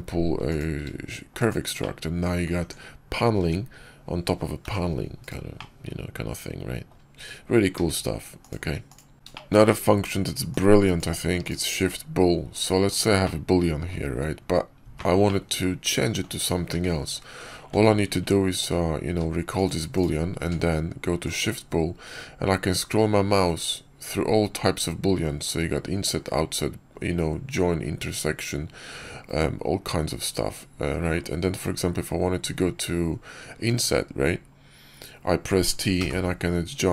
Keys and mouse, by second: 1.7-2.3 drag, 2.5 Tab, 3.3 Tab, 4.5 g, 5.4-6.3 drag, 6.3-6.8 middle drag, 7.6 q, 9.2 shift+middle drag, 9.6 middle click, 10.4-11.1 drag, 11.3 click, 11.7-12.9 drag, 13.1-13.8 middle drag, 15.1-16.1 middle drag, 16.6 q, 19.0 q, 20.3 q.